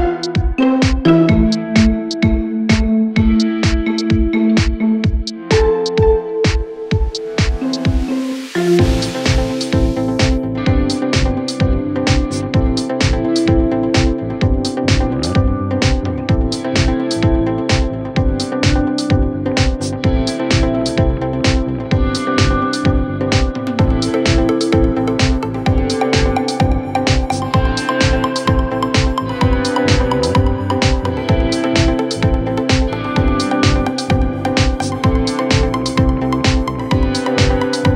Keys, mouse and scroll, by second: 8.5 ctrl+z, 9.8 ctrl+z, 10.8 ctrl+z, 11.1 ctrl+z, 11.3 ctrl+z, 20.4 space, 22.6 space, 24.8 space.